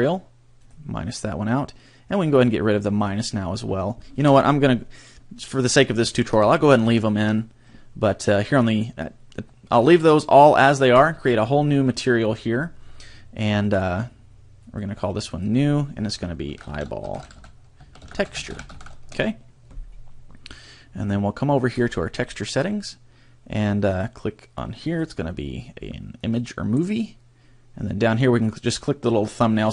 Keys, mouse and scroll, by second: 0.6 click, 3.0 click, 6.4 ctrl+z, 7.0 ctrl+z, 10.9 click, 14.6 click, 15.3 click, 21.7 click, 23.8 click, 24.8 click.